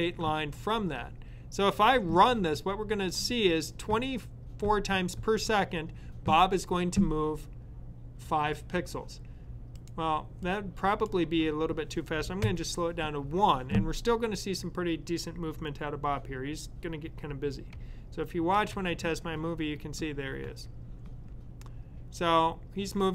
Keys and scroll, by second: 12.3 1.